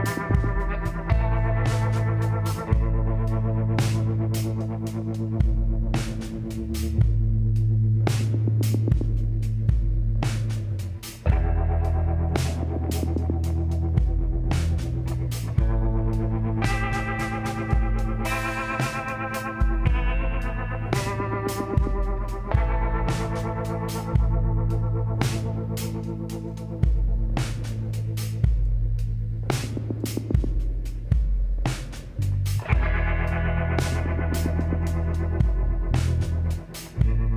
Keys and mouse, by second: 2.0 click, 3.0 ctrl+KP_Add, 3.2 ctrl+KP_Add, 3.5 ctrl+KP_Add, 5.4-9.1 drag, 9.5-12.0 middle drag, 12.0-15.3 drag, 14.3 x, 16.6-18.3 drag, 18.3 g, 23.2-25.0 drag, 24.1 g, 26.4-28.2 drag, 27.8 s, 32.8 s, 36.0 click.